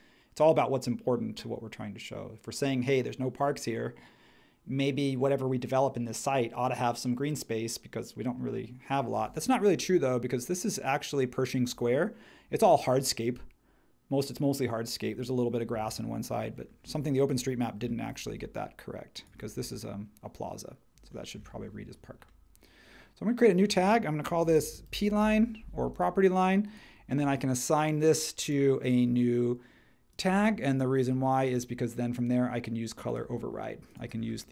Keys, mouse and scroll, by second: 17.8-19.5 drag, 24.1-25.5 typing.